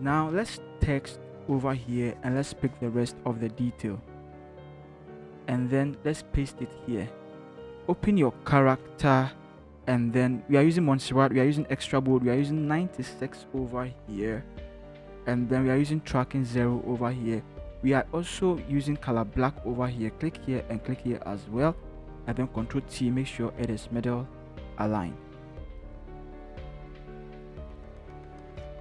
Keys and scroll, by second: 0.1 v, 0.6 t, 4.7 ctrl+c, 6.2 ctrl+v, 13.9-14.7 typing, 22.6 ctrl+t, 28.6 shift+Return.